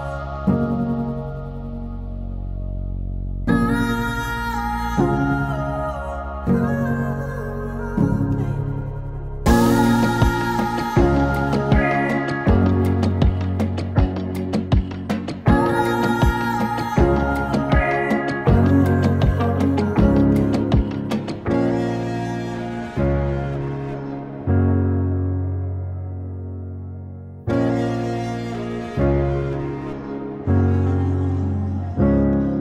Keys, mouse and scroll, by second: 2.0-4.2 typing, 2.0 click, 4.8-7.5 drag, 7.5 space, 8.2 space, 9.1 click, 11.0 space, 12.1 click, 13.7 click, 17.9 click, 20.8 click, 24.7-32.6 drag.